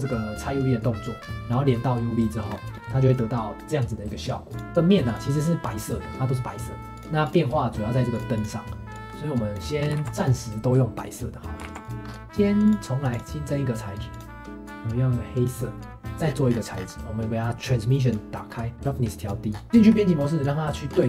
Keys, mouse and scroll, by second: 2.5 scroll down 2, 2.7-4.5 middle drag, 4.5 click, 4.7 g, 5.0 click, 5.6-6.9 middle drag, 6.9-9.8 drag, 9.8 scroll down 1, 10.0 ctrl+s, 11.1 click, 11.6 ctrl+s, 12.0 scroll up 4, 12.6-14.2 drag, 16.1 click, 16.2-16.9 scroll down 14, 17.6-19.5 drag, 19.5 scroll up 4, 19.7 Tab, 19.8-20.9 shift+middle drag, 20.9-21.0 scroll up 4.